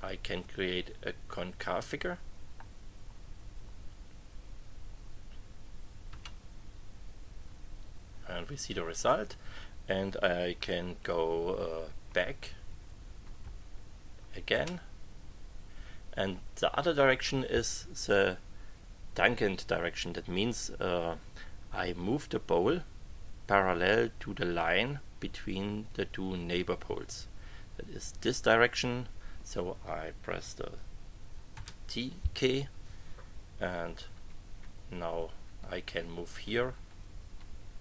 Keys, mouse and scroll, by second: 6.1 Return, 12.1 Page_Up, 14.5 Return, 31.5 t, 34.1 Page_Up, 36.1 Page_Down.